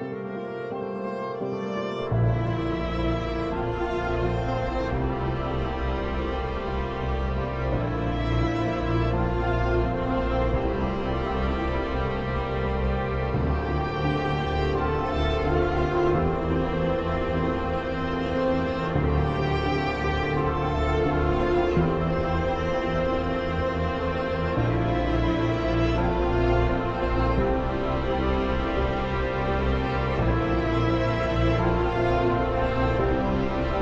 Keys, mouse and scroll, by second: 17.4 click, 20.4 Caps_Lock, 20.4 click, 24.9 F4, 26.3 click, 27.4 F2, 27.7 click, 28.9 right click, 30.0 click, 31.3 right click, 32.6-33.8 drag.